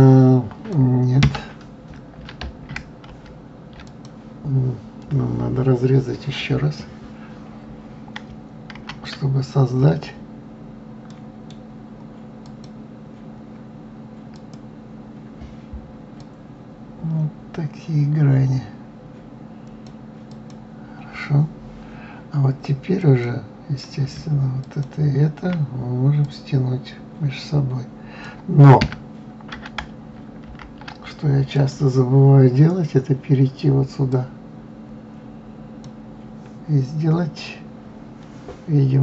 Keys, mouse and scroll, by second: 1.6 Escape, 3.5 ctrl+z, 4.3 click, 9.1 ctrl+r, 16.6-19.6 drag, 20.7 click, 23.4 click, 25.0 shift+click, 26.6-29.2 drag, 29.2 Escape, 30.8 ctrl+z, 31.9 click, 34.5 click.